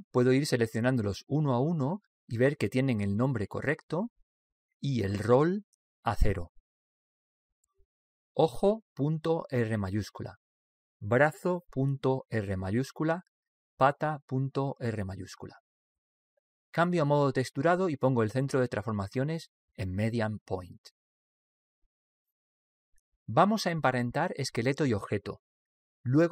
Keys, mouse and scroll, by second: 0.8-3.9 right drag, 2.9-4.7 middle drag, 4.1 right click, 6.4 right click, 7.5 click, 11.5-15.8 right drag, 16.5-18.4 middle drag, 19.3 alt+z, 21.2 click, 23.0-26.3 middle drag.